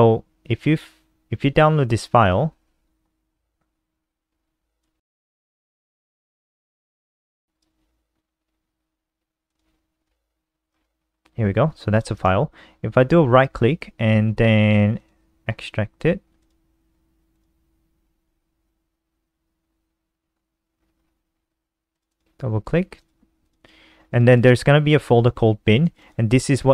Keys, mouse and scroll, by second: 4.9 super+w, 6.1-6.6 scroll down 4, 7.5 click, 10.2 ctrl+r, 10.9 scroll down 5, 11.2 scroll up 2, 12.0 click, 12.4 right click, 20.8-22.1 scroll down 6, 22.1 click, 22.3 click, 23.2 click, 23.8 click, 24.3 click, 24.5 click, 26.0 click, 26.2 click.